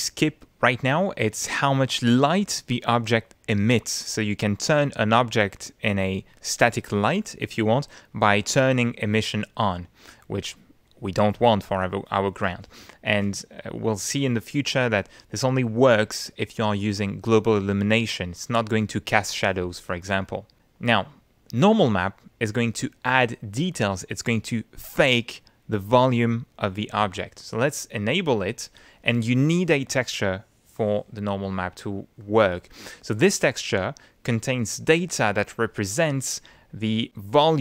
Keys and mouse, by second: 10.1 click, 13.2 click, 13.8 click, 20.8 click, 27.7 click, 29.9-32.4 drag.